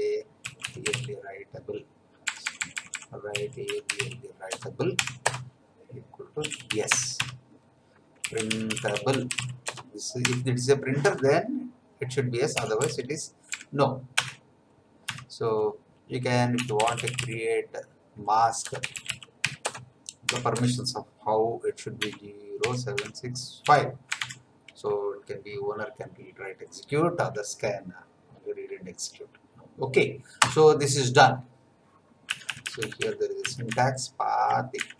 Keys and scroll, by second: 0.1-11.0 typing, 7.2 Tab, 12.5 n, 12.8 p, 13.5 BackSpace, 14.1 Return, 15.0 Tab, 16.3-20.5 typing, 22.0-24.2 typing, 30.3 Return, 32.2 Up, 33.7 Right, 34.8 Left.